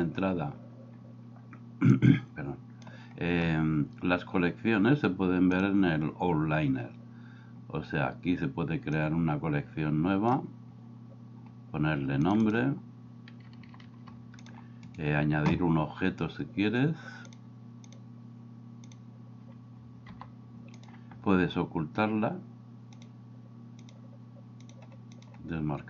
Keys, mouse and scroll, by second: 5.6-6.8 drag, 9.1-10.3 drag, 12.4 click, 13.6 t, 14.0 t, 14.8 right click, 17.4-19.0 drag, 20.1 g, 22.9 click, 23.8 click, 24.6 click, 25.2 click.